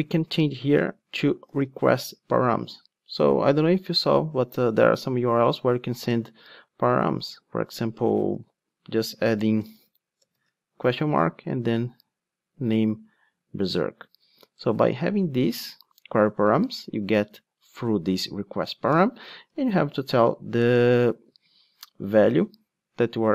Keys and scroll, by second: 2.3 Return, 22.0 Return.